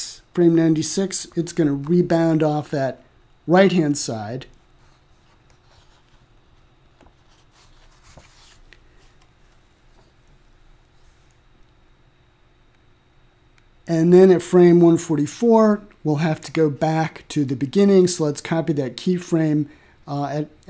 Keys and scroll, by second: 19.3 ctrl+c.